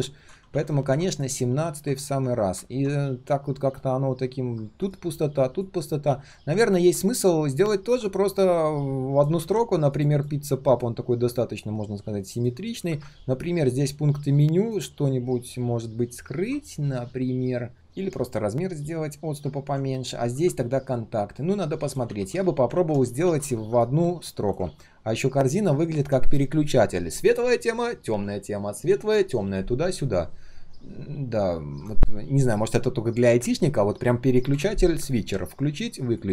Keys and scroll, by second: 0.5 ctrl+shift+z, 0.6 ctrl+shift+z, 6.0 ctrl+z, 6.5 ctrl+z, 9.3 ctrl+z, 19.5 ctrl+z, 22.0 ctrl+z, 22.3 ctrl+z, 22.7 ctrl+z, 24.6 ctrl+z.